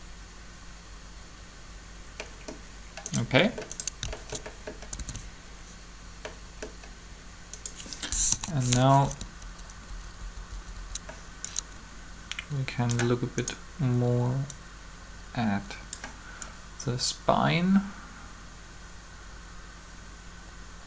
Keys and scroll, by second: 5.0 alt+shift+a, 8.1 3, 9.0 Up, 9.2 Up.